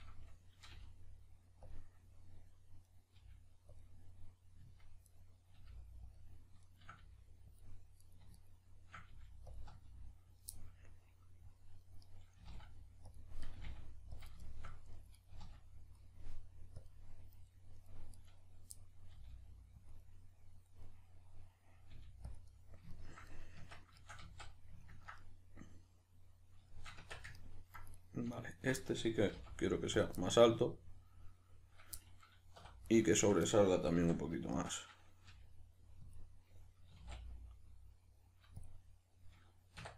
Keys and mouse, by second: 1.7 click, 2.9 right click, 3.1 g, 3.8 click, 4.6 z, 5.1 right click, 5.5 g, 6.1 click, 6.7 shift+right click, 7.0 g, 7.6 click, 8.0 right click, 8.3 shift+right click, 9.1 g, 9.5 click, 9.6 z, 10.5-12.0 middle drag, 12.0 right click, 12.4 g, 13.1 click, 13.4 right click, 13.6 g, 14.2 click, 14.4 shift+middle click, 15.1 right click, 15.3 g, 16.8 click, 17.5-18.1 middle drag, 18.1 right click, 18.7-19.9 middle drag, 19.1 g, 19.9 click, 20.0-22.3 middle drag, 21.9 g, 22.3 click, 22.9 ctrl+middle click, 23.3 middle click, 23.6 Tab, 24.3-27.9 middle drag, 24.3 z, 27.0 Tab, 27.9 right click, 28.3 shift+right click, 28.5 shift+right click, 28.8-29.3 middle drag, 29.3 g, 30.1 click, 30.2-32.9 middle drag, 32.6 3, 32.9 right click, 33.1 shift+right click, 34.0 alt+q, 34.5-36.1 shift+middle drag, 35.3 g, 36.1 click, 36.9 s, 38.7 click, 39.8 1.